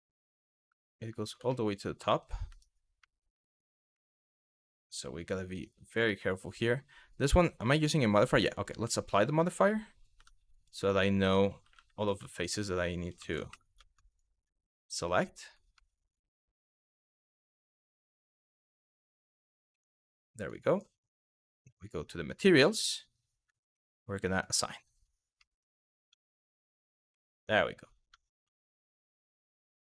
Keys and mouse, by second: 1.1 shift+middle drag, 2.2 Tab, 2.8 middle click, 3.7 middle click, 6.1 click, 7.3 click, 8.3 click, 9.8 Tab, 11.3 Tab, 12.8 ctrl+z, 13.2 3, 13.8 alt+click, 14.6 alt+click, 15.5 middle click, 16.3 alt+click, 18.1 ctrl+z, 19.4 ctrl+z, 20.1 click, 22.5 click, 24.1 click, 25.1 middle click, 25.7 Tab, 26.9 middle click, 27.7 Tab, 28.2 shift+middle click, 28.7 click, 29.2 middle click.